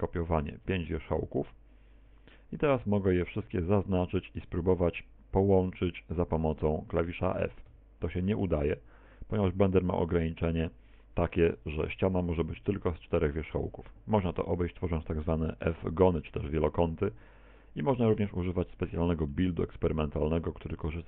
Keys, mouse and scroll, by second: 1.5 click, 2.7 right click, 3.0 shift+right click, 3.3 right click, 3.7 right click, 4.1 shift+right click, 5.4 middle click, 7.7 f, 9.4 f, 18.8 middle click, 19.7 middle click, 20.7 middle click.